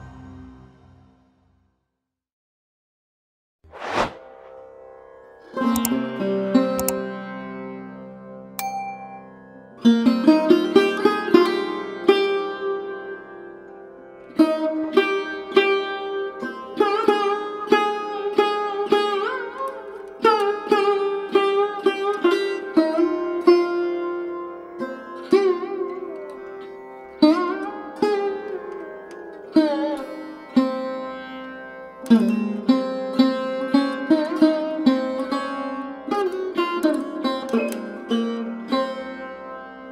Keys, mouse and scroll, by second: 1.4 middle click, 2.4 click, 2.9 3, 3.0 click, 3.7 e, 5.0 middle click, 5.7 g, 6.4 KP_7, 6.8 g, 7.5 scroll down 2, 7.7-8.0 middle drag, 8.2-8.8 middle drag, 8.8 Tab, 9.0 click, 9.6 KP_1, 10.1 click, 10.8 right click, 11.2 click, 11.4-12.2 scroll up 3, 12.2 click, 12.3 click, 12.6-12.9 scroll down 5, 12.9-14.2 drag, 14.5 drag, 14.7-15.0 scroll down 3, 15.0-16.6 middle drag, 17.0 KP_1, 17.8 a, 19.0-19.4 shift+middle drag, 19.4 click, 19.7 scroll up 1, 20.7 click, 21.3-23.4 drag, 24.3 click, 25.4 click, 25.9 click, 28.5 click, 30.3 click, 30.7-31.1 drag, 32.2 click, 32.9 click, 36.9-38.0 drag.